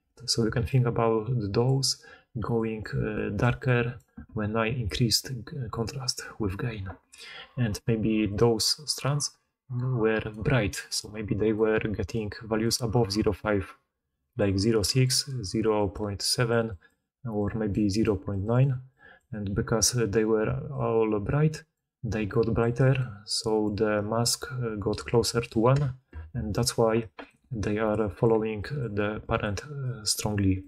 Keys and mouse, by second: 0.4-1.7 d, 2.3-3.0 d, 3.1-4.1 d, 7.9 d, 8.2 d, 10.2-20.4 typing, 20.4-25.5 drag, 20.4-25.5 middle drag, 20.4-25.5 right drag, 21.8-26.0 typing, 27.2 d, 27.3 d, 27.8-30.5 d.